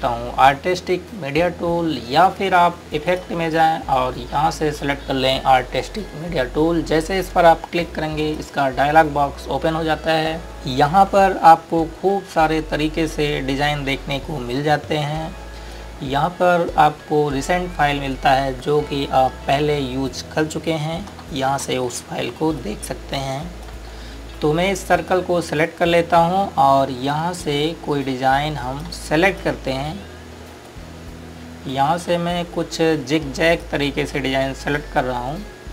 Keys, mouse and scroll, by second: 4.0 click, 8.9 click, 14.1 click, 23.6 click.